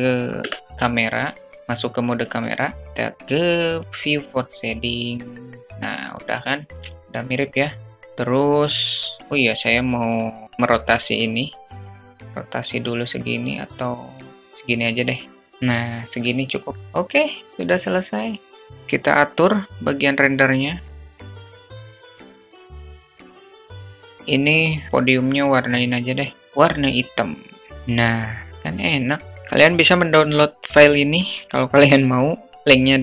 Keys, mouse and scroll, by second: 3.2 click, 6.3 shift+a, 6.7-7.4 shift+drag, 6.8 shift+a, 11.6-14.3 drag, 16.5 click, 23.9-26.5 drag, 28.5 click.